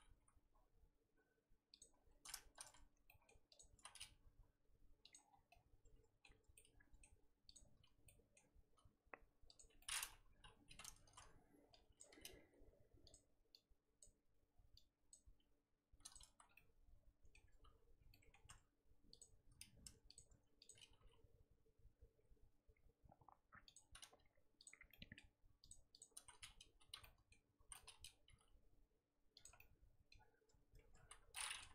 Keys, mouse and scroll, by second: 0.2 g, 2.7 z, 3.1 middle click, 3.5 click, 3.8 z, 4.1 g, 5.2 scroll down 1, 5.5-7.5 middle drag, 7.5 click, 8.0 middle click, 8.5-9.5 scroll up 1, 9.5 ctrl+click, 9.8 middle click, 10.3 KP_3, 11.1 z, 11.2-11.7 scroll up 1, 12.0 click, 12.3 g, 14.0 click, 15.1 click, 15.4 g, 16.3 z, 16.4 scroll down 3, 16.5-17.6 middle drag, 17.6 Tab, 17.9 scroll up 2, 18.1 middle click, 18.4 Tab, 19.2 click, 20.1 shift+click, 20.9 g, 24.1 z, 24.6 click, 24.9 middle click, 25.7 shift+click, 26.0 shift+click, 26.2 z, 27.0 z, 27.0 middle click, 27.6 z, 27.7 middle click, 28.3 g, 29.5 scroll down 1, 29.6 middle click, 30.3 Tab, 30.7 Tab, 31.0 z, 31.3 middle click.